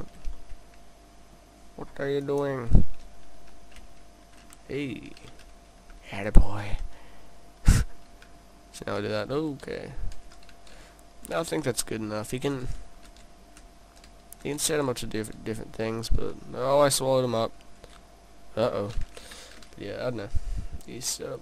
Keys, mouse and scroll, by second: 0.3 middle click, 2.0 middle click, 2.3 click, 2.4 click, 20.9 click.